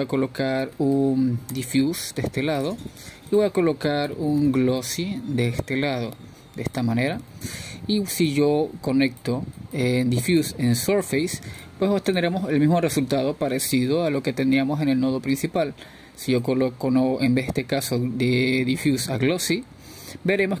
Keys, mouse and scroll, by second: 8.1 shift+a, 11.6-12.6 drag, 13.5 click, 19.7-20.6 drag.